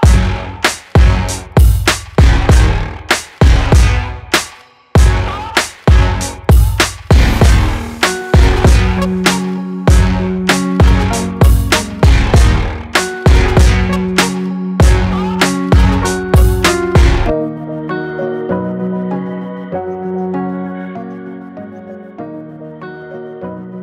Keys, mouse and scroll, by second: 0.0 click, 0.0 click, 2.7 click, 2.9 click, 4.2 click, 6.6 click, 7.4-8.1 typing, 8.6-10.8 drag, 10.5-11.3 typing, 11.4 Return, 12.8 click, 14.5 shift+click, 17.9-18.7 typing, 18.1-19.9 drag, 21.0-21.7 typing, 21.2 click.